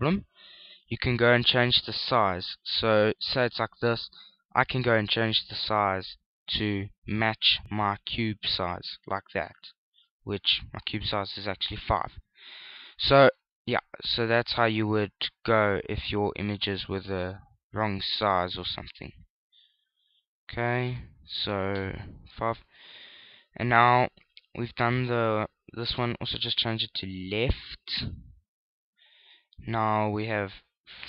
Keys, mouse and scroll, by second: 2.3 click, 5.8 click, 11.2 click, 16.8 click, 21.6 click, 26.6 click, 30.7 click.